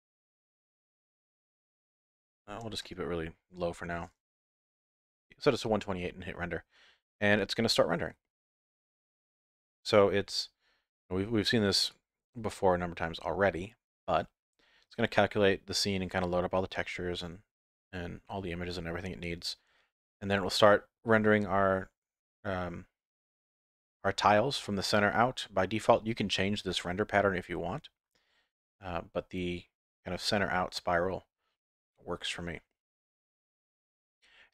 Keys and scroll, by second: 4.6 F12.